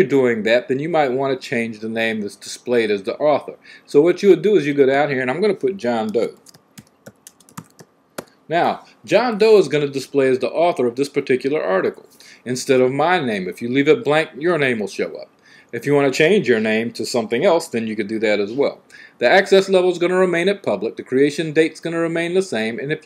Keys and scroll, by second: 6.1-8.5 typing.